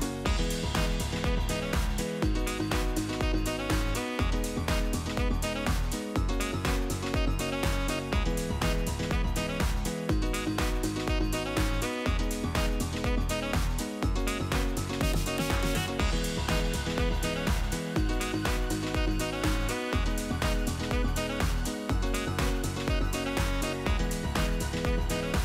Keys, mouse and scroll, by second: 0.3 click, 0.5-1.1 middle drag, 1.1 Tab, 1.2-1.7 scroll up 1, 1.7 middle click, 1.9-2.3 scroll down 1, 2.3 click, 3.0 click, 3.5 Tab, 3.8 click, 4.3 Delete, 4.8-5.2 middle drag, 5.2 click, 5.3 scroll up 2, 5.5-5.8 shift+middle drag, 5.8-6.2 scroll up 1, 6.2 Tab, 7.0 click, 7.5-10.5 shift+click, 11.6 s, 12.8-14.0 middle drag, 14.0 click, 14.6-16.5 shift+click, 16.8 shift+click, 17.0 shift+click, 17.7 s, 19.0 middle click, 19.8 KP_3, 20.1 KP_1, 20.6 KP_3, 21.2-21.6 scroll up 2, 21.8-22.1 shift+middle drag, 22.1-22.5 scroll up 2, 23.2 click, 24.1-24.6 drag, 25.1 g.